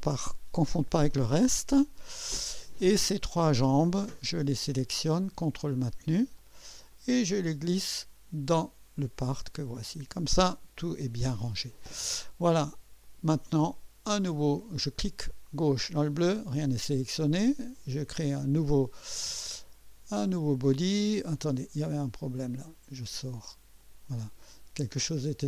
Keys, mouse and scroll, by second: 0.0-0.3 typing, 2.1 click, 3.9 click, 5.8 ctrl+click, 6.4 ctrl+click, 6.8-7.7 typing, 6.9-8.5 ctrl+drag, 9.8 click, 13.0 click, 15.9 click, 17.9 click, 22.5 click, 23.8 click, 25.0 click.